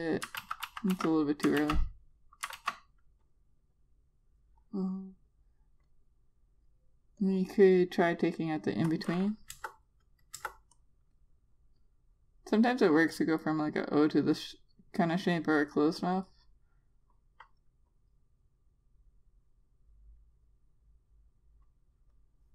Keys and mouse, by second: 1.4 ctrl+z, 1.5 ctrl+z, 1.8 ctrl+z, 2.4 ctrl+z, 3.4 ctrl+z, 4.1 click, 10.4 Return, 11.2 Return, 11.6 click.